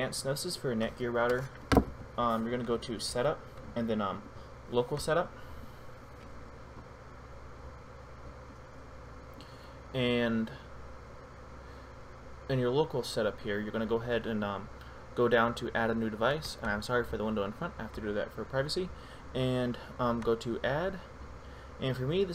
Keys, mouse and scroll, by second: 16.8 click, 20.5 click.